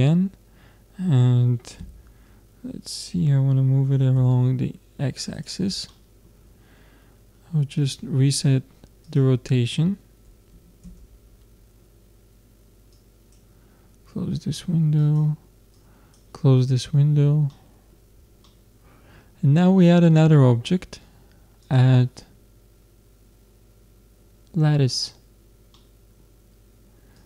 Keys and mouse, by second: 5.9-7.7 middle drag, 7.8-10.8 drag, 13.0-14.7 drag, 15.0-17.6 drag, 17.6-20.7 middle drag, 21.6-23.5 drag, 25.7-27.1 middle drag, 27.1-27.2 drag.